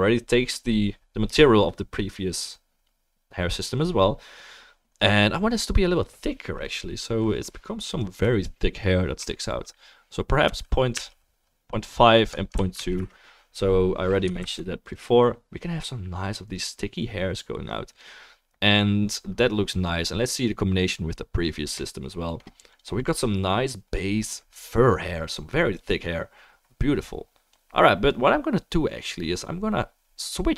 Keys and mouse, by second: 5.7 click, 14.4 ctrl+s, 14.9-30.5 right drag, 17.9 click, 17.9 middle click, 20.8-22.8 drag, 20.8-22.8 middle drag, 25.8 click, 25.8 middle click, 27.6-30.5 drag, 27.6-30.5 middle drag.